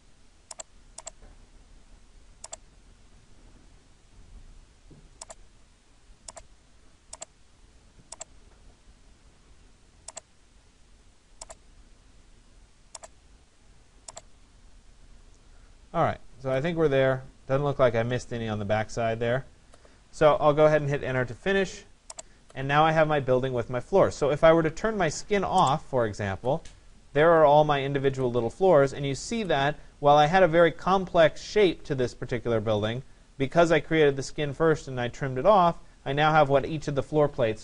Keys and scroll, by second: 20.7 Return.